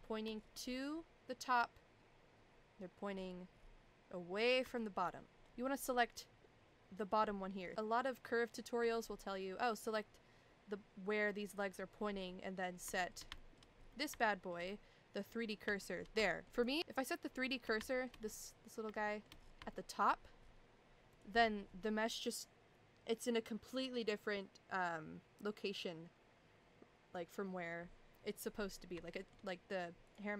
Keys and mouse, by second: 0.0 shift+middle click, 4.7 shift+middle click, 8.2 shift+middle click, 9.8 click, 12.9 shift+middle click, 13.4 shift+middle click, 13.9 middle click, 14.2 shift+middle click, 15.8 shift+middle click, 16.3 shift+middle click, 16.5 click, 17.9 shift+middle click, 19.0 shift+middle click, 19.7 shift+middle click, 21.1 click, 29.1 shift+middle click.